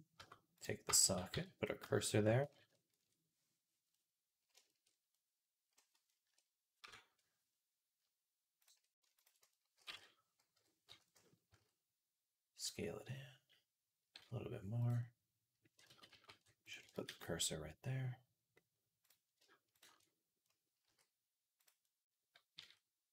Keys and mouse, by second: 0.8 shift+s, 1.1 z, 2.4 ctrl+KP_Add, 3.8 click, 4.0 click, 4.9 click, 6.1 ctrl+KP_Add, 6.6 ctrl+KP_Subtract, 9.0 ctrl+click, 9.7-12.6 middle drag, 11.3 s, 12.6 click, 12.9-14.0 drag, 14.0-15.3 middle drag, 14.0 s, 15.6 ctrl+click, 15.7 ctrl+z, 15.9 ctrl+z, 16.5 click, 16.7 shift+click, 16.9 shift+s, 17.3-21.6 drag, 17.6 right click, 20.7 s, 21.7-23.1 drag, 22.4 s.